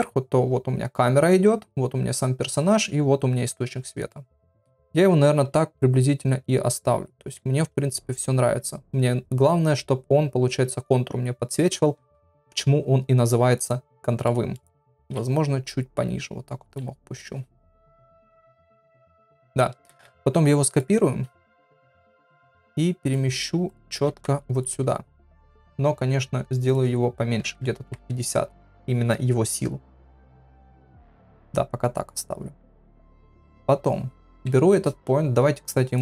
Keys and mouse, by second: 4.1 middle click, 5.1 g, 14.2 middle click, 15.0 g, 17.7 KP_1, 19.9 shift+d, 21.4 shift+middle click, 22.2 click, 22.5 shift+s, 23.7 click, 24.1 shift+s, 26.7-29.8 drag, 30.2 middle click, 34.4 KP_7, 35.9-36.0 drag.